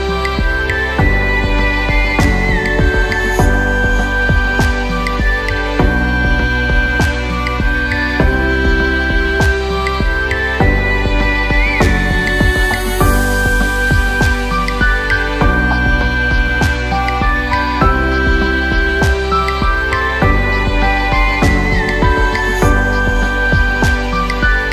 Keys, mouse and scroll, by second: 1.0-1.3 scroll up 1, 1.6 click, 3.5 click, 4.5 click, 5.6-6.5 drag, 7.3-9.2 drag, 12.4 click, 13.0-15.4 drag, 16.6 click, 19.3 click, 22.3-23.1 drag.